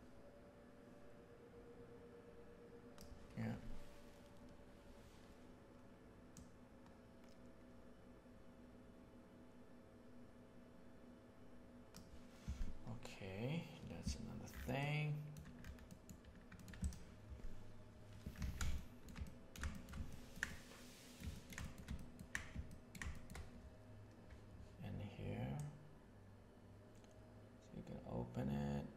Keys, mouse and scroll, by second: 6.3-7.5 drag, 10.1 click, 14.8 middle click, 15.8 middle click, 18.3 alt+a, 18.7-19.1 shift+middle drag, 19.1-19.5 ctrl+middle drag, 19.7 shift+middle drag, 20.0 ctrl+middle drag, 20.4-21.1 middle drag, 21.3-21.7 ctrl+shift+middle drag, 21.9 ctrl+middle click, 22.6 ctrl+middle drag, 23.1 shift+middle click, 25.5-28.9 drag.